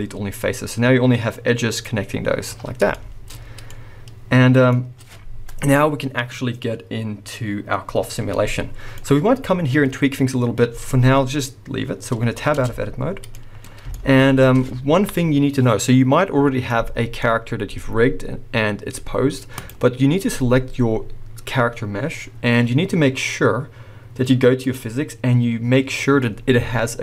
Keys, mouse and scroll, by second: 0.2-1.6 scroll down 2, 1.6 scroll down 1, 1.8 middle click, 2.4 scroll up 1, 2.6 scroll down 1, 2.9 shift+middle click, 3.4 scroll down 1, 3.6-19.6 middle drag, 8.1 scroll down 1, 9.1-11.0 scroll up 1, 12.6 Tab, 13.1 scroll down 1, 13.6 scroll up 1, 17.3-19.6 scroll down 1, 19.6 click, 24.6 click.